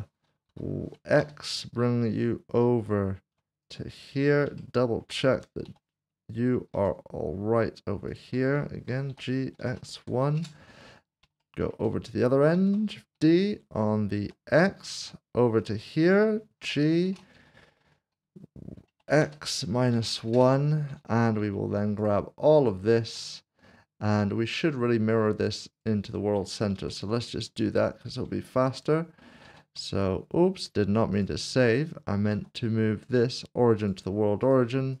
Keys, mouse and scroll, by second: 0.5-1.2 typing, 4.1 click, 4.2 scroll up 1, 4.6 shift+middle click, 5.6 typing, 6.7 typing, 8.1 ctrl+click, 9.6-9.9 typing, 10.4 Return, 11.0 scroll down 1, 11.4 shift+middle click, 12.5 typing, 14.2 typing, 15.6 ctrl+click, 19.2-19.9 typing, 20.3 Return, 22.0 shift+click, 25.7 click, 26.7 typing, 27.5 click, 29.4 ctrl+s, 31.1 click, 32.3 s, 33.8 s, 34.2 click.